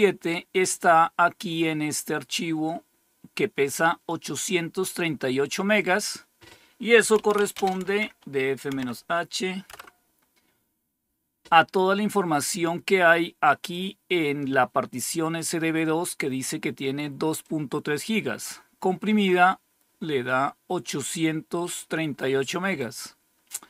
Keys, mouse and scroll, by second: 2.2-6.7 drag, 6.8-9.6 typing, 13.6-16.2 drag, 17.3-23.6 drag.